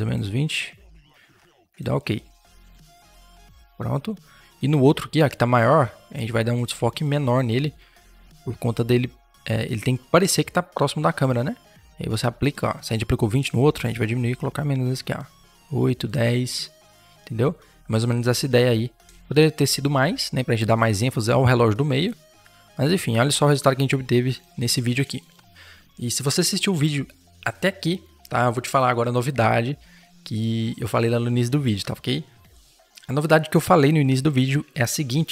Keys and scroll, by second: 17.0 Return, 20.5 ctrl+z, 24.8 ctrl+0.